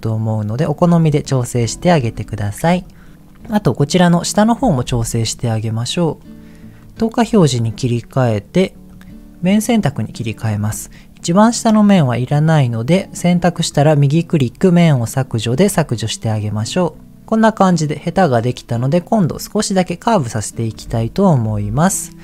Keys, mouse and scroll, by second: 0.7 click, 1.0 middle click, 2.0 Tab, 2.0-2.6 scroll down 2, 2.6 middle click, 2.9 scroll down 1, 3.1 middle click, 4.5 Tab, 5.0 middle click, 6.8 click, 7.4 shift+middle click, 8.9 click, 10.5 click, 11.0-12.0 middle drag, 13.5-14.6 right drag, 14.8-15.9 right drag, 17.3-18.4 middle drag, 20.5 click, 21.4 KP_1.